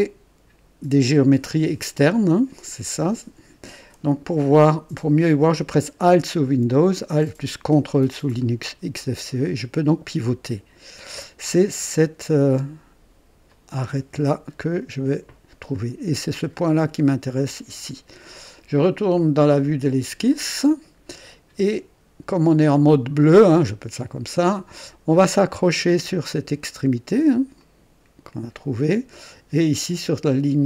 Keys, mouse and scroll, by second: 8.4-11.2 ctrl+alt+drag, 13.4 click, 15.5 scroll up 1, 20.2 click, 24.3 click, 27.5 click.